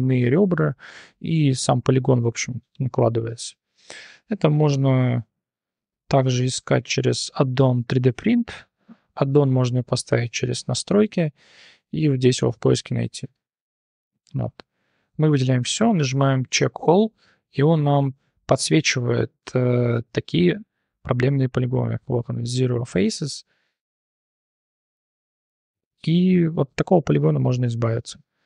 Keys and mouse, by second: 0.0-1.2 typing, 0.8 click, 2.6 shift+click, 4.0 3, 4.3 click, 6.1 3, 6.3 click, 7.6 click, 9.1-10.2 drag, 14.1 click, 15.4 a, 16.5-17.6 drag, 21.7 click, 23.4 3, 24.3 click, 24.8-25.6 drag, 26.0 g, 27.4 click, 27.9-28.4 drag.